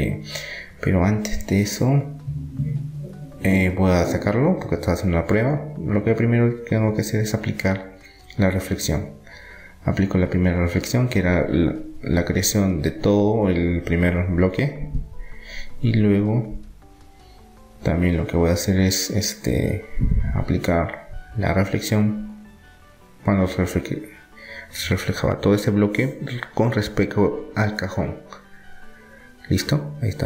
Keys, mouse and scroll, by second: 10.5-11.5 middle drag, 12.5 Tab, 13.1 Tab, 13.5 Tab, 14.6 Tab, 15.7-16.8 middle drag, 20.1-23.5 middle drag, 25.0-29.9 drag, 29.2 Tab.